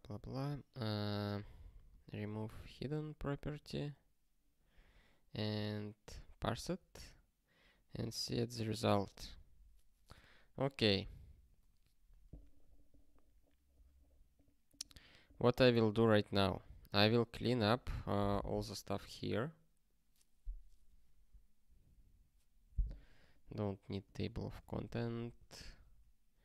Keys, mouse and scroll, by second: 0.1 super+o, 4.8 super+o, 6.6 ctrl+e, 8.0 ctrl+e.